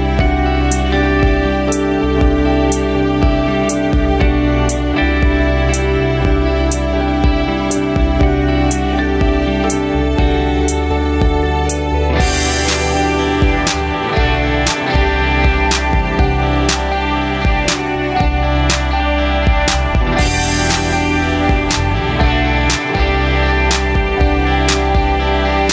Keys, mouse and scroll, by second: 1.8 click, 3.2 click, 3.9-7.2 drag, 7.5 click, 8.8-11.0 drag, 11.5-12.6 drag, 14.6 g, 16.8 click, 20.2-23.4 middle drag, 24.4-25.3 scroll up 1.